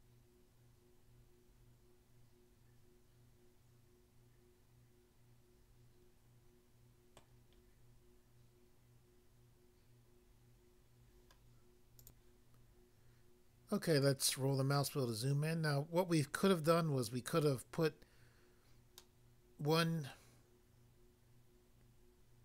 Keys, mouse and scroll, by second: 7.2 middle click, 12.0 click, 12.2 click, 14.1 scroll up 1, 14.6-15.3 scroll up 1, 15.3 scroll up 1, 19.0 middle click, 20.1 middle click.